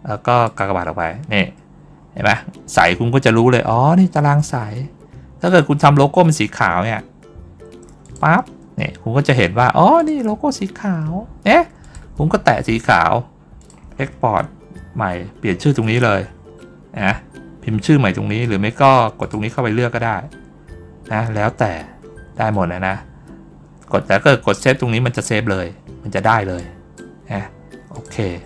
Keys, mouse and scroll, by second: 0.3 click, 1.8 ctrl+middle click, 1.8-2.2 ctrl+scroll down 2, 2.1 ctrl+middle click, 3.9 ctrl+middle click, 4.3 ctrl+middle click, 5.3 click, 7.9 shift+click, 8.8 ctrl+scroll up 2, 9.1 ctrl+middle click, 9.1 ctrl+scroll down 1, 9.8 click, 10.4-10.9 ctrl+scroll up 1, 10.9-11.2 ctrl+scroll down 1, 11.7 click, 13.4 click, 19.0 click, 24.9 click, 26.4 click, 27.8 click.